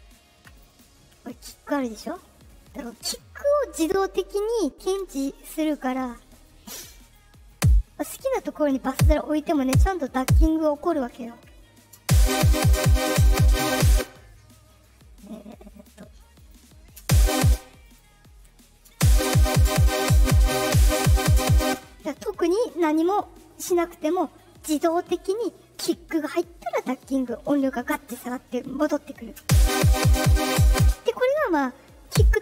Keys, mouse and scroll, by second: 0.5 click, 0.6 click, 6.4 click, 7.4 click, 8.8 click, 9.5 click, 10.1 click, 11.9 space, 13.8 space, 15.7 click, 16.3 click, 16.9 space, 17.3 space, 17.7 click, 18.8 space, 21.6 space, 29.3 space, 30.7 space, 32.0 click.